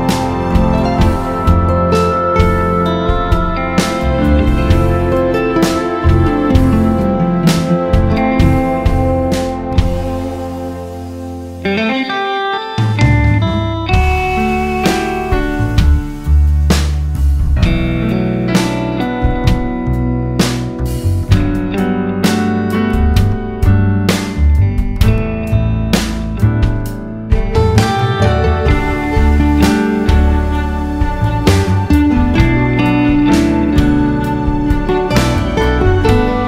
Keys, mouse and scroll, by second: 2.1 right click, 2.6 click, 2.9 g, 8.4 click, 9.6 Tab, 10.1 ctrl+z, 10.9 scroll down 1, 11.1 ctrl+s, 13.5 drag, 13.7 `, 14.9 click, 16.5 scroll down 1, 17.9 scroll up 1, 18.2 `, 18.7 scroll down 1, 18.9 `, 19.3 click, 19.6 KP_Decimal, 20.3 click, 25.5 click, 28.8 click, 29.2 ctrl+v, 29.7 click, 31.0-33.9 drag, 34.3 scroll up 1, 35.0 scroll down 1, 35.7-36.0 scroll up 3.